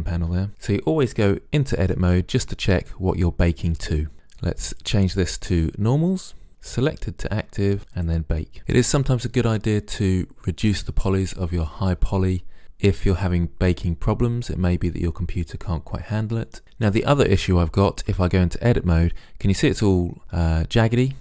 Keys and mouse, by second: 1.3 Tab, 1.9 Tab, 4.8-6.5 drag, 6.8-7.3 drag, 7.3-8.0 middle drag, 8.0 click, 18.1 Tab.